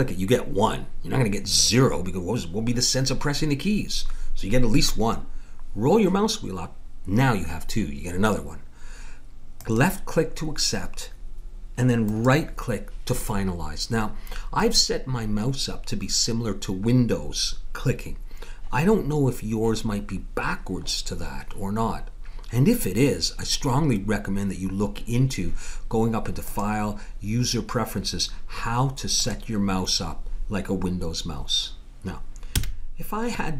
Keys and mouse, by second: 26.5-28.3 drag, 32.5 a.